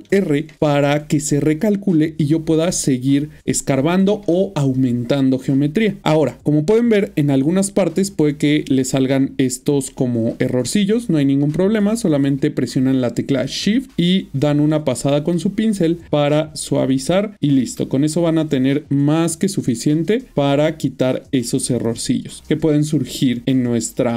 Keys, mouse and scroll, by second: 0.0 ctrl+r, 0.5 middle click, 2.1 ctrl+click, 4.7 ctrl+click, 4.8 middle click, 6.0 middle click, 7.3 middle click, 9.9 middle click, 11.1 shift+click, 13.6 shift+click, 15.4 middle click, 16.7 middle click, 18.1 shift+middle click, 19.5 shift+click, 20.8 middle click, 23.1 shift+click, 23.5 middle click.